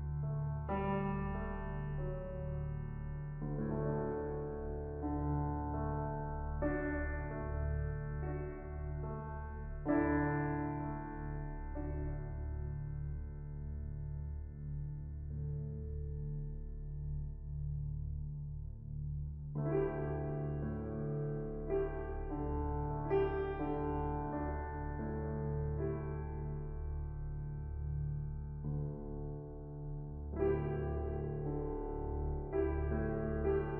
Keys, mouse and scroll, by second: 0.0 middle click, 0.1-1.0 scroll up 6, 0.4 middle click, 1.0-2.1 drag, 4.8-5.8 middle drag, 5.8-6.6 scroll down 3, 6.6-20.6 drag, 20.6 middle click, 20.8 scroll up 3, 20.9 middle click, 21.3-22.5 drag, 22.5-23.2 scroll up 2, 22.5 middle click, 23.2 click, 23.8 KP_0, 25.6 middle click, 26.0-27.0 scroll down 2, 27.0 click, 28.5-30.0 drag, 30.0 middle click, 30.5-30.9 scroll up 2, 30.9 middle click, 31.2-32.0 scroll up 1, 32.0-33.3 drag, 33.6-33.7 shift+drag.